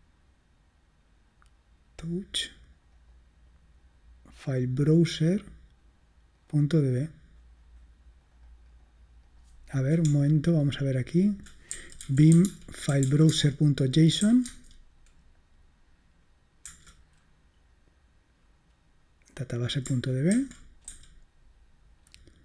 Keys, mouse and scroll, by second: 2.9 click, 6.5 click, 8.3 click, 9.3 click, 10.1-14.2 typing, 14.5 Tab, 16.8 Return, 20.4-20.9 typing.